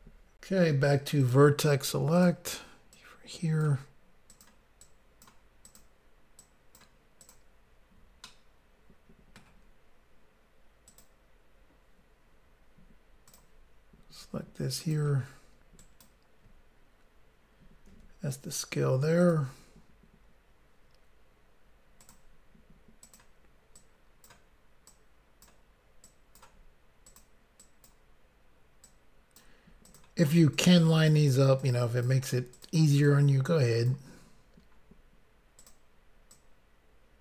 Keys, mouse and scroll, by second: 1.3 click, 2.1 click, 2.2 click, 2.9 click, 4.3 click, 4.4 click, 4.8 click, 5.6 click, 5.7 click, 6.4 click, 7.2 click, 7.3 click, 8.2 shift+middle click, 10.8 click, 11.0 click, 13.2 click, 13.3 click, 14.8 click, 14.9 click, 15.8 ctrl+right click, 19.2 click, 19.3 click, 22.0 click, 22.1 click, 23.0 click, 23.2 click, 23.8 click, 24.9 click, 26.0 click, 27.1 click, 27.2 click, 27.6 click, 28.8 click, 29.9 click, 30.0 click, 30.5 click, 31.6 click, 32.5 click, 32.7 click, 33.1 click, 35.6 click, 35.7 click, 36.3 click.